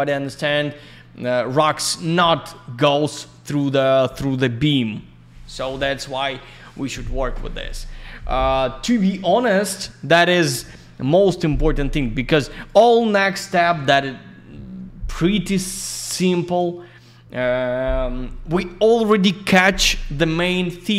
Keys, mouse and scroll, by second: 6.0-7.3 scroll down 1, 9.0 click, 12.6 click, 13.3 middle click, 13.5 middle click, 14.6 scroll down 1, 15.3 right click, 15.4 right click, 16.0 right click, 16.1 right click, 16.4 click, 16.5 double click.